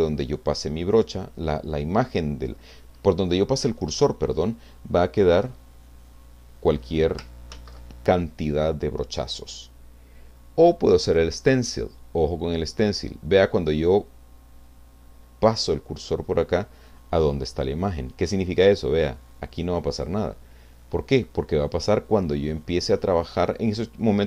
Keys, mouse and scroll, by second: 5.2-7.2 drag, 7.5 ctrl+z, 9.4 click, 11.0 click, 19.1-20.6 drag.